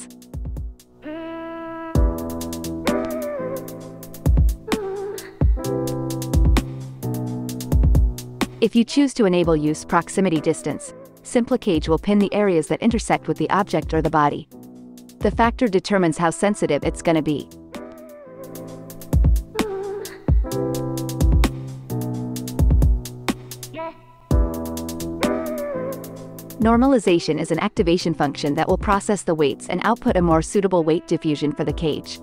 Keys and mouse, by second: 0.0 shift+Left, 4.2-6.3 typing, 5.2-8.4 drag, 7.4 space, 10.7 click, 12.0 click, 12.8-13.5 drag, 13.9 ctrl+Tab, 16.6 ctrl+Tab, 18.1 x, 19.0 ctrl+Tab, 19.8 click, 21.5-21.9 drag, 22.3 ctrl+Tab, 23.4 KP_Divide, 25.1 ctrl+Tab, 26.1 KP_Divide, 26.7 x, 27.3 click, 27.6 ctrl+Tab, 28.5 click, 31.2-32.2 drag.